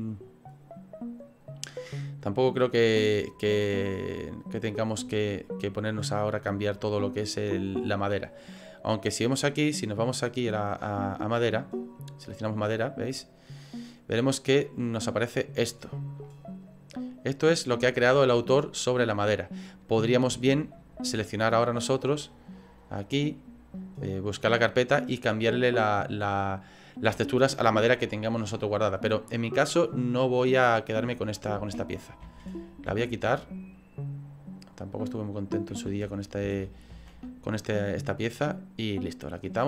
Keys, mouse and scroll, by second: 2.5 right click, 5.2 click, 9.2 click, 11.8 click.